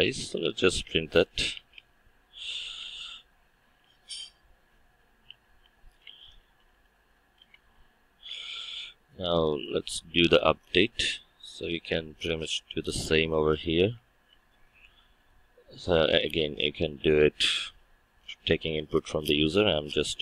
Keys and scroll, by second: 3.0 Return, 14.3 ctrl+c.